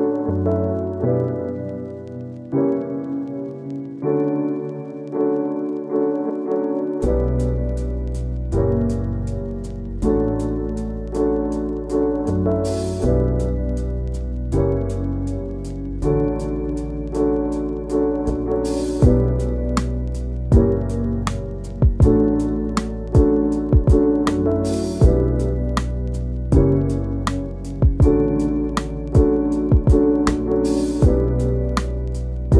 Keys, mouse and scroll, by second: 0.5 f, 0.9 click, 1.5 middle click, 1.8-5.3 drag, 5.3-5.7 scroll down 2, 5.9 middle click, 6.0 scroll up 1, 6.3 shift+click, 6.7 scroll down 1, 6.8 middle click, 7.2 scroll up 1, 7.5 middle click, 7.7-11.7 drag, 11.7 f, 11.9 middle click, 12.3 scroll up 1, 12.4 shift+middle click, 12.8-15.2 shift+drag, 15.2 scroll down 2, 15.4 middle click, 15.5 scroll up 1, 15.7 middle click, 16.1 scroll up 1, 16.3 shift+click, 16.7 scroll down 2, 16.9 scroll up 2, 17.0 shift+click, 18.0 scroll down 3, 18.2 middle click, 18.8 scroll up 1, 19.0 shift+middle click, 19.5 middle click, 19.9 scroll up 1, 20.1 click, 20.6 scroll down 1, 20.8 shift+middle click, 21.1 scroll up 1, 21.3 click, 22.2 scroll down 1, 22.3 click, 22.9 shift+middle click, 23.3 scroll up 1, 23.4 middle click, 23.7 click, 24.0 scroll down 1, 24.2 click, 24.8 middle click, 25.1 click, 25.4 middle click, 25.6 click, 26.6 scroll down 1, 26.7 middle click, 26.8 scroll up 1, 27.0 shift+click, 27.5 middle click, 27.6 shift+click, 27.9 middle click, 28.2 shift+click, 28.4 scroll down 2, 28.5 middle click, 28.6 scroll up 1, 28.8 shift+click, 29.0 scroll down 1, 29.3 shift+middle click, 29.6-30.0 scroll up 2, 30.1 scroll down 1, 30.2 shift+middle click, 30.5 scroll up 1, 30.7-31.2 scroll down 1, 31.2 click, 31.3 scroll down 1, 31.6 click, 31.8 middle drag, 32.0 scroll up 1.